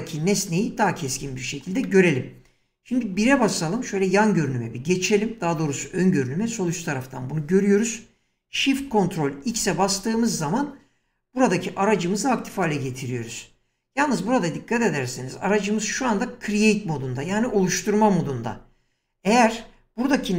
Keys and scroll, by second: 3.2 1, 9.5 shift+x.